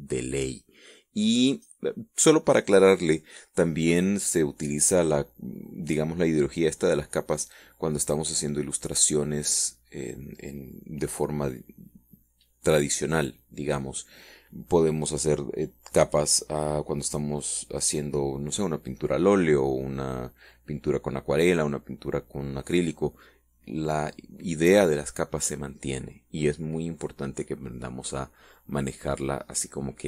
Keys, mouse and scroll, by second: 0.1-2.4 drag.